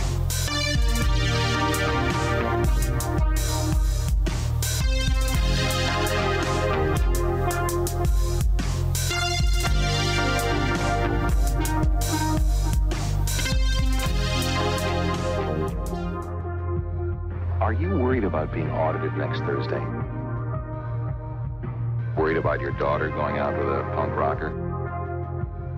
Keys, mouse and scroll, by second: 0.6 middle click, 1.5 click, 6.2 n, 7.6 click, 12.8 scroll up 1, 13.1 click, 14.2 middle click, 15.6 click, 21.1 q, 25.5 click, 25.6 q.